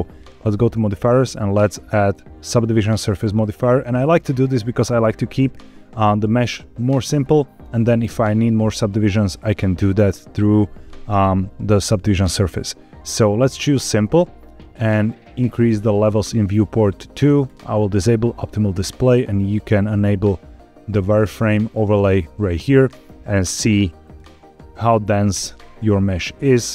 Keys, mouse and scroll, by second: 0.9-3.4 drag, 13.7 click, 13.8 right click, 15.4 click, 17.4 click, 22.3 click, 24.0 click, 25.3 click.